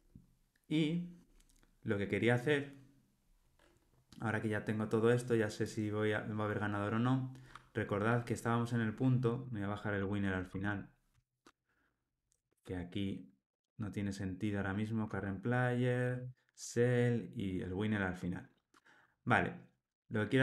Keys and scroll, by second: 10.5 alt+shift+Down, 11.1 alt+shift+Up, 12.4 alt+shift+Up, 12.5 shift+super+Down.